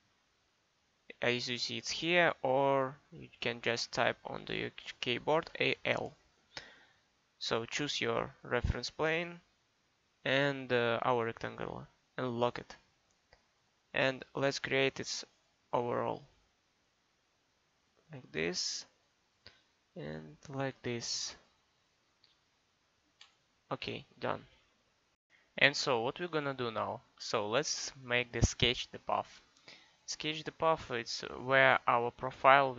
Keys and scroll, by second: 5.4 a, 5.5 l.